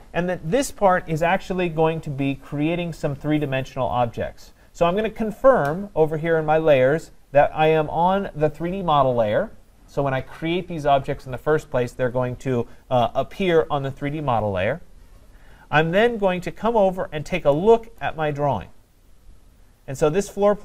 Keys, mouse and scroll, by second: 17.0-18.0 scroll, 18.0 right click, 20.0-20.6 scroll.